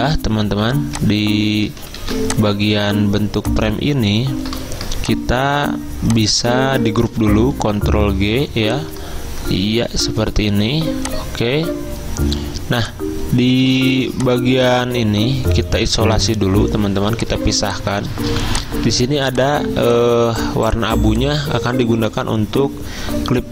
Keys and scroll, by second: 2.1 ctrl+z, 7.3 ctrl+g, 17.0 z, 18.3 v.